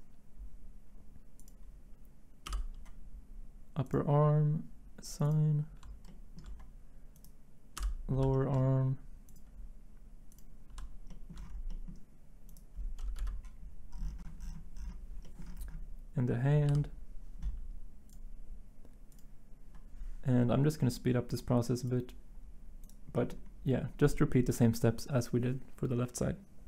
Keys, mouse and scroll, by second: 7.8 l, 13.2 Delete, 13.2 i, 16.7 i.